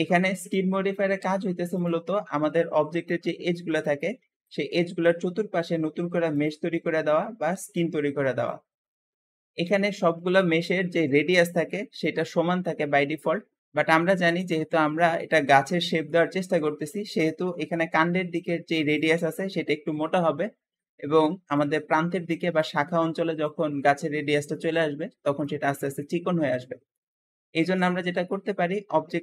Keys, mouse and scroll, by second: 1.6 click, 5.3 Escape, 6.2 click, 8.4 middle click, 27.7 Escape.